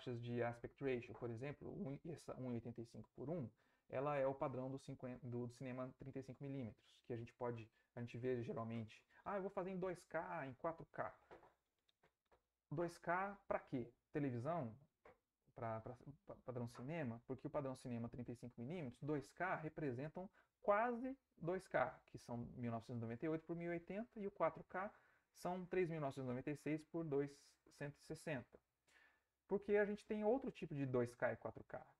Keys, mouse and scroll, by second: 3.0 Right, 29.9 Right.